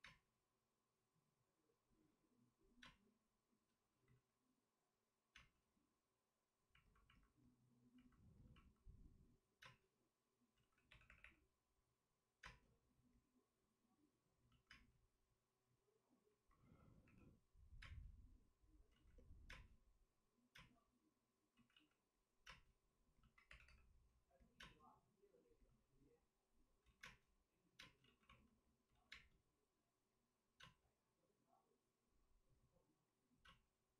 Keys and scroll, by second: 2.8 space, 3.7 space, 4.0 ctrl+z, 5.3 space, 9.6 space, 10.5 ctrl+z, 10.8 3, 11.1 3, 11.2 3, 12.4 space, 16.6 space, 17.0 3, 17.8 space, 19.4 ctrl+z, 19.4 space, 20.5 space, 21.5 ctrl+z, 22.4 ctrl+z, 22.4 space, 23.4 3, 24.5 space, 24.5 3, 26.8 ctrl+z, 27.0 space, 28.0 ctrl+z, 28.0 space, 29.1 ctrl+z, 29.1 space.